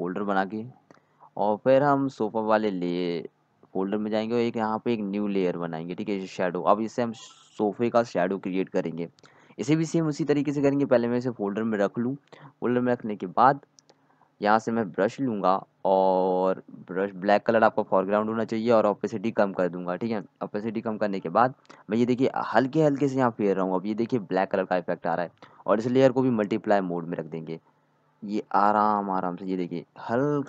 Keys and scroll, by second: 0.0-0.1 typing, 7.8-9.7 typing, 20.5 z.